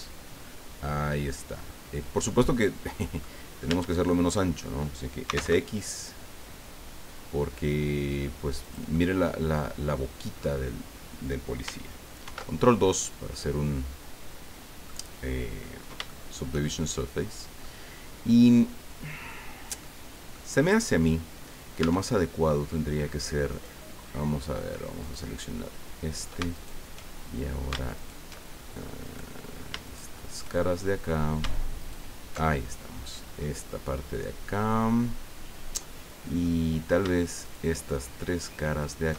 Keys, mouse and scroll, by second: 2.7 scroll down 1, 3.2 click, 3.7 Tab, 4.1 click, 5.2 s, 5.3 x, 8.6 click, 8.9-10.6 middle drag, 12.2 ctrl+2, 13.3-15.0 middle drag, 15.6-15.9 scroll up 2, 16.1-17.7 shift+middle drag, 19.8 middle click, 21.8 Tab, 22.1 middle click, 23.5 right click, 25.0 click, 26.5 alt+right click, 27.3-27.6 alt+scroll up 1, 27.9 alt+shift+right click, 29.0 right click, 29.8 shift+right click, 30.5 shift+middle click, 31.2 scroll up 2, 31.8 alt+shift+right click, 32.4-36.6 alt+shift+middle drag, 36.6-37.0 scroll up 2, 37.4 shift+right click, 37.9 shift+right click, 38.8 shift+right click.